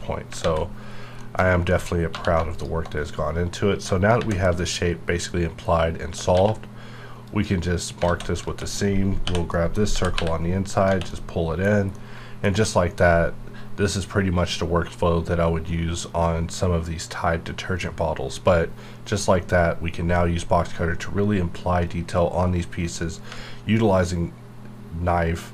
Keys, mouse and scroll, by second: 0.4 alt+x, 0.9 scroll down 1, 1.2 middle click, 1.4-2.1 scroll up 2, 1.7 middle click, 2.1 3, 2.5 alt+click, 3.2-3.8 scroll up 1, 4.2 shift+`, 6.3 q, 7.3 click, 8.0 alt+a, 8.4 3, 9.2 l, 9.5 middle click, 9.9 g, 10.1 y, 10.7 click, 10.8 Tab, 11.1 middle click, 11.7 scroll down 1, 11.9-15.1 middle drag, 23.3 ctrl+Num_Lock.